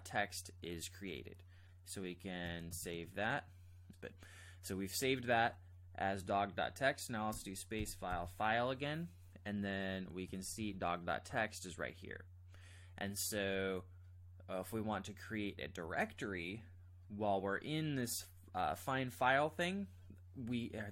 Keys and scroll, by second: 2.5-2.8 typing, 3.1 Return, 7.3-8.1 typing, 10.1-10.9 typing.